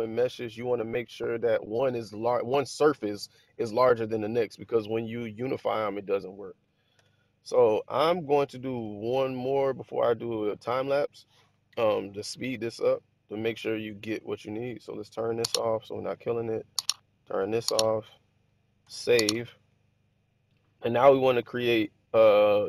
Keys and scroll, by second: 6.9 1, 18.7 super+s.